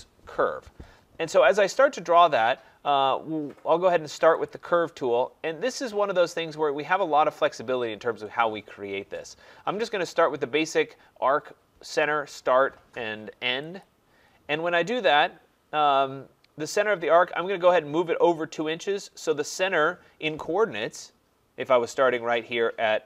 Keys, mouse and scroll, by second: 4.5-9.6 drag, 13.8 click.